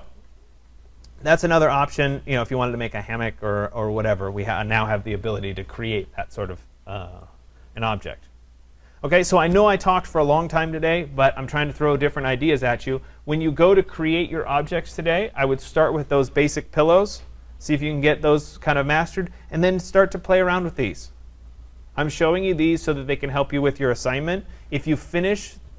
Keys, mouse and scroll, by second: 0.1 right click, 0.3-0.7 scroll, 1.2 right click, 2.0-3.5 scroll, 7.8-12.9 right drag.